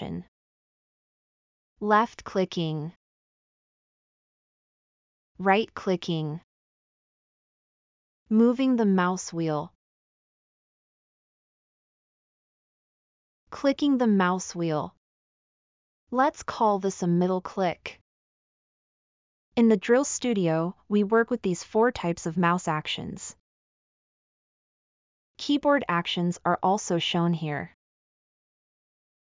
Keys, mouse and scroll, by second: 7.5 scroll, 7.7 scroll, 7.8 scroll, 7.9 scroll, 8.1-8.7 scroll down 12, 8.8-9.5 scroll up 14, 9.7-10.5 scroll, 10.5-11.4 scroll down 12, 11.5-12.9 scroll up 10, 12.9 middle click, 13.3 middle click, 13.5 middle click, 13.7 middle click, 13.9 middle click, 14.3 middle click, 14.6 middle click, 14.9 middle click, 15.1 middle click, 15.3 middle click, 15.5 middle click, 15.8 middle click, 16.1 middle click, 16.3 middle click, 16.6 middle click, 16.8 middle click, 17.0 middle click, 17.2 middle click, 17.5 middle click, 17.6 middle click, 17.9 middle click, 18.1 middle click, 21.9-23.0 scroll up 10, 23.0 middle click, 27.2 space, 28.9-29.3 typing.